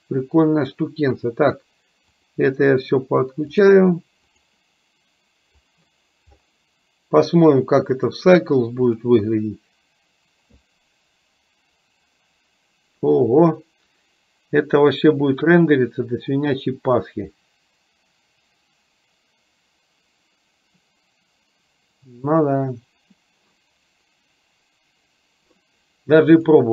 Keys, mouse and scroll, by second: 2.4 click, 3.7 click, 4.6 drag, 5.9 click, 8.2-9.2 drag, 26.6-26.7 drag.